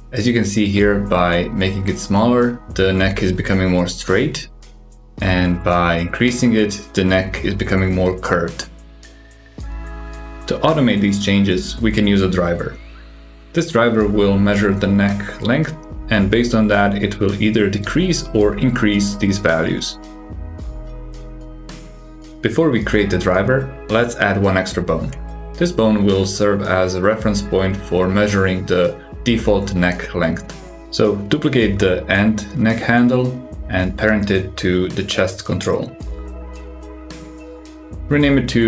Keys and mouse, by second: 2.9 click, 3.1 g, 5.2 click, 6.3-12.4 drag, 13.3 click, 13.6 g, 15.1 click, 16.1-19.8 drag, 22.5 super+KP_6, 24.1 click, 25.3-26.2 drag, 27.0 alt+z, 28.0 shift+d, 28.9 s, 29.6 ctrl+alt+s, 30.5 s, 32.8 shift+click, 34.2 ctrl+p, 38.0 click.